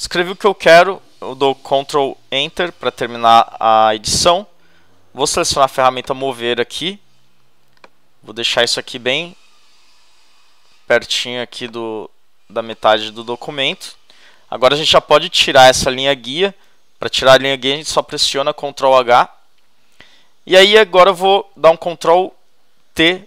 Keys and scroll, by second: 2.3 shift+super+Return, 18.9 shift+super+h, 22.9 shift+super+t.